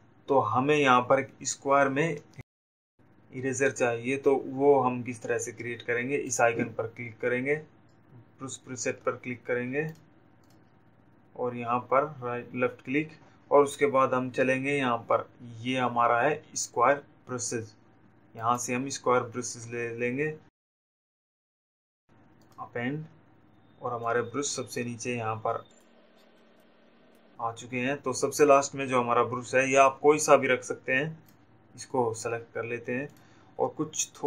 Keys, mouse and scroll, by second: 10.1 click, 12.2 click, 21.0 click, 23.3 click, 25.0 click, 27.0 click, 31.8 click, 33.3 click.